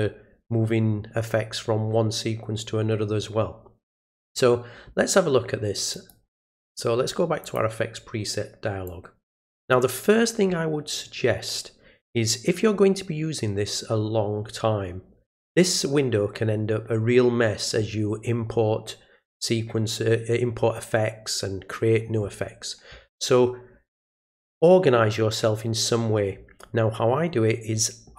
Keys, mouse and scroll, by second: 5.9 right click, 7.4 click, 8.9 click.